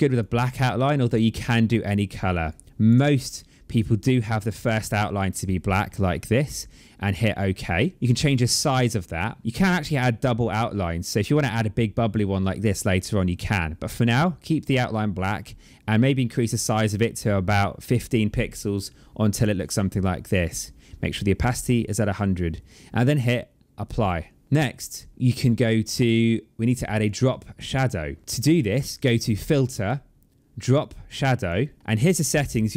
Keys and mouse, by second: 0.9 click, 2.3 click, 6.9 click, 8.0 click, 29.1 click, 31.2 click.